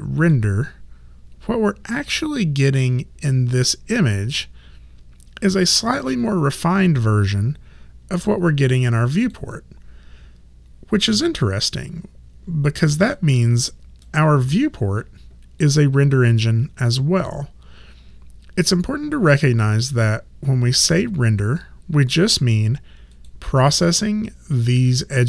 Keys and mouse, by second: 0.2 click, 4.3 click, 8.2 click, 13.2 click, 15.6 click, 23.1 click.